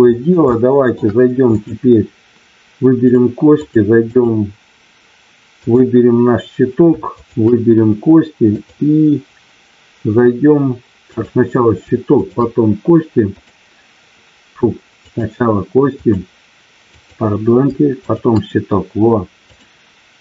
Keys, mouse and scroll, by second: 0.5 shift+middle click, 1.4 click, 3.4 click, 7.2 shift+click, 8.5-10.5 drag, 11.0 click, 12.1 shift+click, 13.3 click, 16.0 click, 17.0 click, 18.0 shift+click, 19.5-20.2 drag.